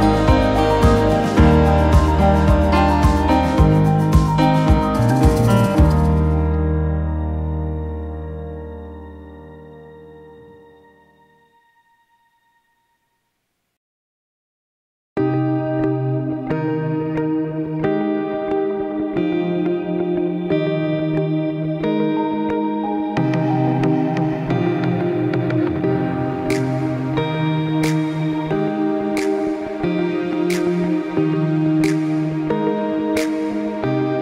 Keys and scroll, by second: 0.1-1.5 typing, 11.9-12.7 typing, 13.2 Return, 14.6 Escape, 21.6 ctrl+shift+p, 24.8 p, 27.4 2, 27.5 Return, 29.8-31.1 typing.